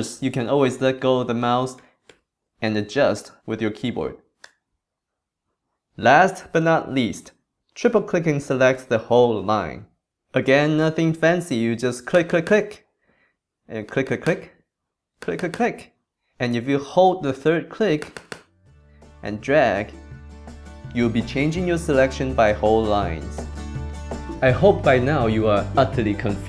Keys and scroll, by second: 1.8 shift+Right, 4.4 BackSpace.